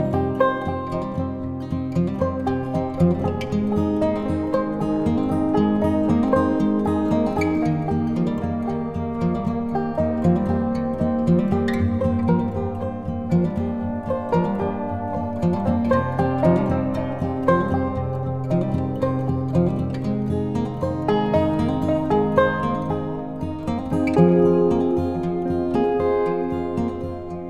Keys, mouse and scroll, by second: 0.8 right click, 1.9-8.8 drag, 9.0 click, 20.0 click, 27.3 click.